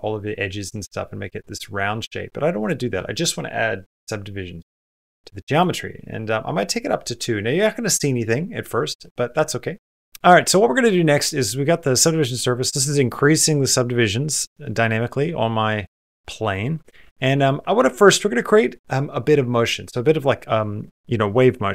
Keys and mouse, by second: 2.4 click, 5.4 click, 9.9 shift+middle click, 10.1 middle click, 12.4 middle click, 16.0 middle click, 16.5 middle click.